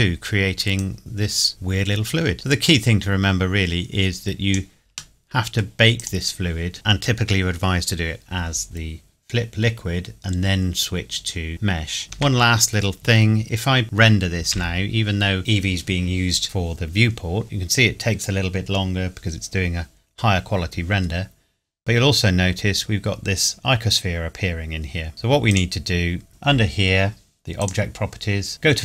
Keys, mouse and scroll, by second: 0.8 click, 5.2 middle click, 6.0 click, 10.6 scroll down 1, 12.2 KP_0, 14.5 F12, 21.0 scroll down 1, 25.1 Escape, 25.5 click, 27.6 click.